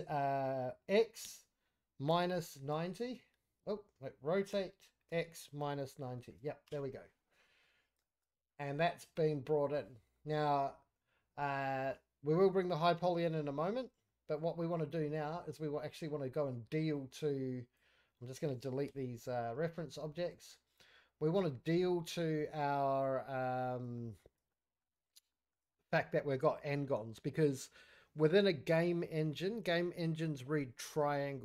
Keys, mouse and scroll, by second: 4.5 r, 7.3 scroll down 1, 7.4 middle click, 7.8 scroll up 5, 8.0 shift+middle drag, 8.3 scroll down 4, 8.5-8.8 middle drag, 9.0 click, 9.4 middle drag, 9.8 scroll up 3, 10.2 shift+middle click, 11.2 scroll up 2, 11.5-11.9 middle drag, 11.9-12.3 scroll down 2, 12.3-12.8 middle drag, 12.8-13.8 scroll down 1, 13.8-14.4 scroll down 5, 14.1-14.4 middle drag, 14.5-15.2 scroll up 3, 15.2 middle click, 15.4 scroll down 2, 15.7-16.4 middle drag, 16.9 click, 18.9 Delete, 19.4-19.9 scroll up 4, 19.9 shift+middle drag, 20.1 shift+scroll down 2, 20.3 middle click, 20.6 scroll up 1, 20.9-23.0 middle drag, 23.3-23.6 scroll up 2, 23.6 scroll down 2, 23.9 shift+middle drag, 23.9 shift+scroll up 1, 24.5-24.8 middle drag, 24.9-25.2 scroll up 3, 25.3 shift+middle drag, 25.7 scroll down 1, 25.7 middle drag, 26.1 scroll up 3, 26.5 shift+middle drag, 26.7-29.8 shift+scroll down 2.